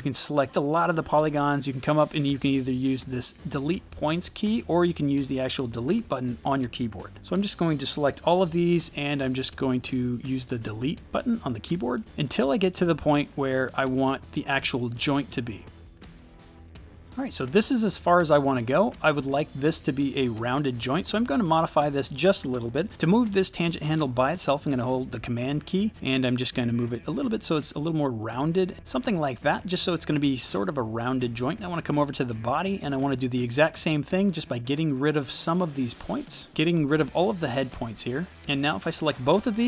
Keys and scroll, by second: 8.4 Delete, 10.5 Delete, 36.5 Delete.